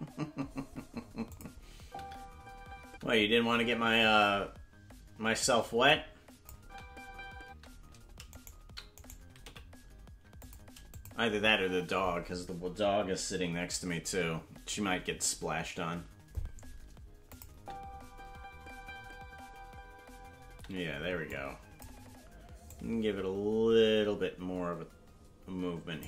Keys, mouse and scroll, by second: 1.3 click, 1.7 space, 5.9 click, 5.9 space, 6.5 space, 8.3-9.4 right drag, 9.4 g, 10.9 click, 11.3 space, 14.1 space, 17.3 click, 17.5 space, 21.3 click, 21.3 space, 22.7-26.0 drag.